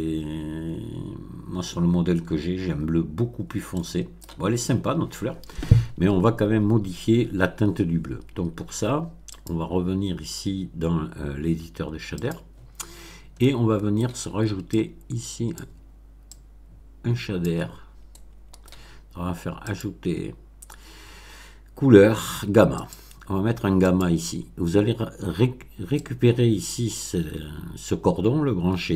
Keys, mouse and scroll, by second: 3.7 middle click, 9.3 click, 12.2 click, 12.9 scroll down 1, 13.4 middle click, 14.7 click, 16.2-17.6 drag, 17.8-18.3 scroll up 2, 18.0 middle click, 19.6 click, 22.7 click, 23.8 click, 25.9-28.9 drag.